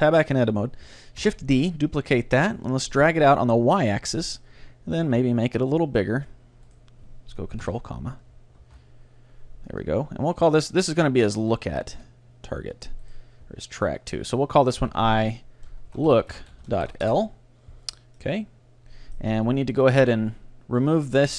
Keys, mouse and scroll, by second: 1.2 shift+d, 4.4-6.2 drag, 5.1 ctrl+alt+s, 7.7 ctrl+,, 8.6 ctrl+alt+s, 10.4-12.5 right drag, 11.1 g, 13.1-14.9 right drag, 14.0-16.0 drag, 16.2 o, 18.2-19.5 middle drag, 19.6 middle click, 19.8 middle click, 20.1 middle click, 20.8-21.3 drag.